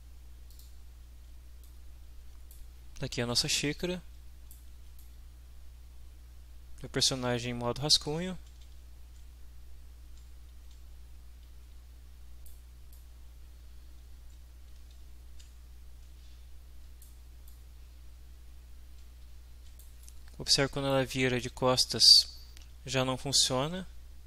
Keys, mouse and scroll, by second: 0.5 click, 1.7 middle click, 2.1 click, 2.5 right click, 3.8 click, 4.0 right click, 4.3 drag, 4.4 right click, 4.5 click, 4.5 right click, 5.0-6.4 right drag, 8.8 right click, 8.8 w, 10.5 w, 11.4 w, 11.8 right click, 12.9-17.2 right drag, 15.0 s, 15.7 w, 17.5-20.0 right drag, 19.2 w, 20.1 right click, 21.4-24.2 right drag, 23.4 s.